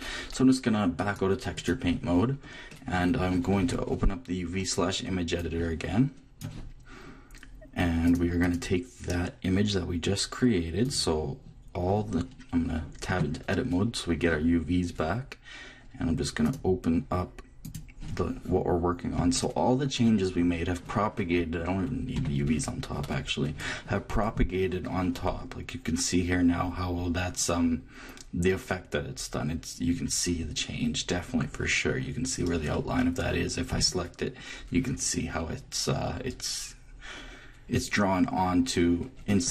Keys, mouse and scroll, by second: 2.3-5.3 middle drag, 3.6 t, 5.3-7.1 drag, 8.0-10.2 drag, 13.1 Tab, 16.2 middle click, 16.5-18.2 drag, 22.1 shift+a, 33.7 a.